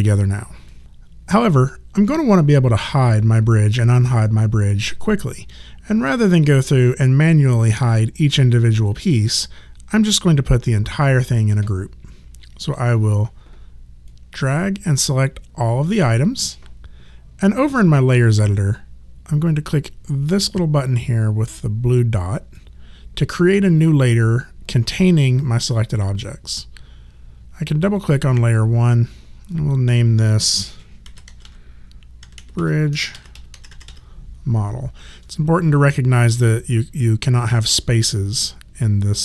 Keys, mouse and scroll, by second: 6.5 click, 14.1 click, 22.6 click, 27.8 click, 30.8-33.8 typing.